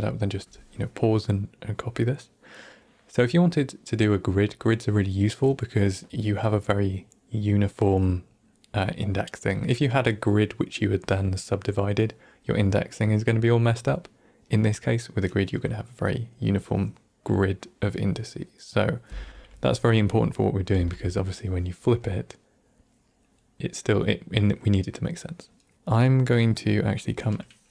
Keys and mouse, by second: 20.3 middle click, 20.8 Tab, 25.7-26.3 middle drag.